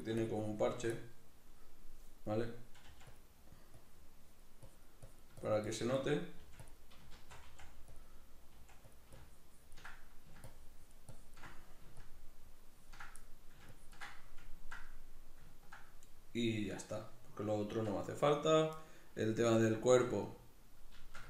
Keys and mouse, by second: 0.9-2.9 middle drag, 2.9 f, 3.2 click, 3.8-6.0 drag, 6.0 middle click, 6.4 f, 6.7 click, 7.2 shift+c, 8.0 click, 8.6 f, 9.0-10.0 ctrl+drag, 10.0 middle click, 10.5-11.5 ctrl+drag, 11.5 middle click, 12.0-13.2 ctrl+drag, 13.2 middle click, 13.8 ctrl+click, 14.6-16.7 ctrl+middle drag.